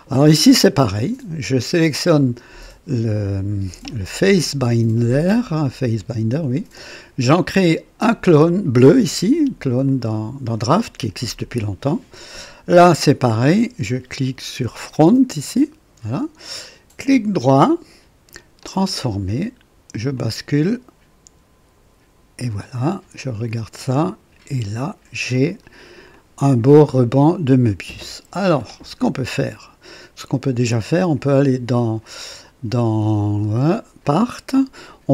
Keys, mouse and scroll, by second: 2.0 click, 9.8 click, 15.4 click, 17.1 right click, 18.6 click, 20.1-22.6 drag, 23.4 click, 24.1 click, 25.5 click, 26.1 click, 27.0-28.7 drag, 29.3-30.7 drag, 31.2 click, 34.0 click.